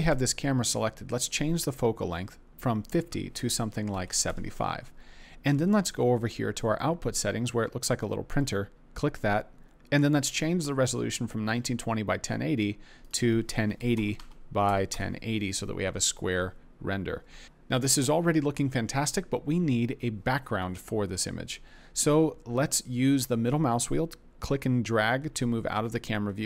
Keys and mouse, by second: 2.8-4.3 drag, 13.0-14.9 drag, 17.4 KP_0, 23.9 middle click.